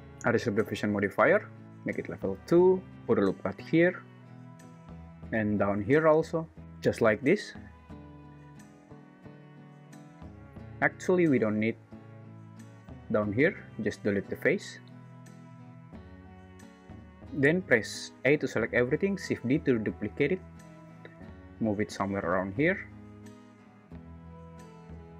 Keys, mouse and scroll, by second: 1.0 click, 2.9 ctrl+super+z, 3.2 ctrl+r, 5.5 ctrl+r, 10.8 3, 12.9 x, 14.8 `, 15.9 Tab, 16.5 Tab, 18.2 a, 19.4 shift+d.